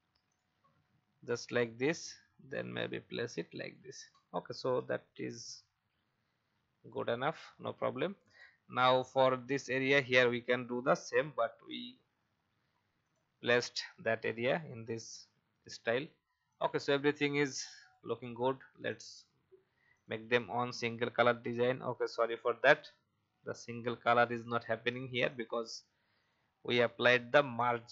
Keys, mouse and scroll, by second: 5.1 Left, 5.7 Left, 6.4 Down, 7.4 alt+scroll down 1, 8.3 click, 8.9 alt+scroll up 1, 11.1 alt+scroll down 1, 12.3-13.0 alt+scroll down 2, 13.0 click, 22.1 ctrl+z, 22.6-23.7 drag.